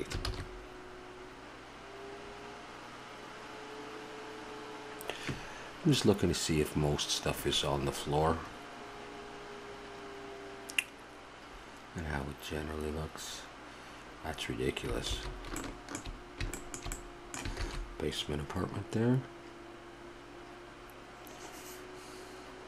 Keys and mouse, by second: 0.4 shift+z, 15.1 shift+z, 15.6-17.0 middle drag, 17.9 shift+z.